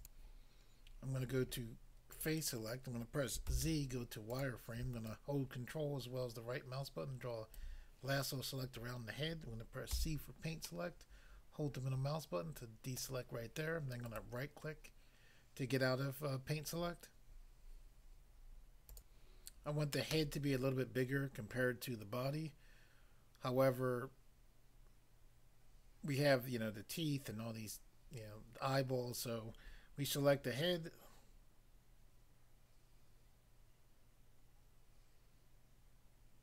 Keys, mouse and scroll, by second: 0.0 click, 0.1 click, 2.1 click, 3.5 z, 4.3 click, 5.0 ctrl+right click, 10.0 c, 10.6 middle click, 13.0 middle click, 14.0 right click, 14.2 right click, 18.9 click, 19.1 click.